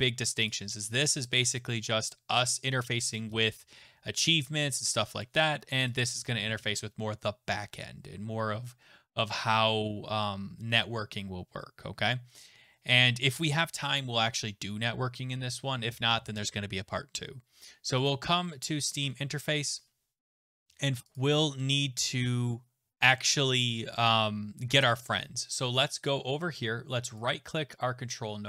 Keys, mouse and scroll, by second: 21.1 click, 22.0-23.9 scroll, 23.9-25.0 scroll, 26.0 click, 27.2 right click.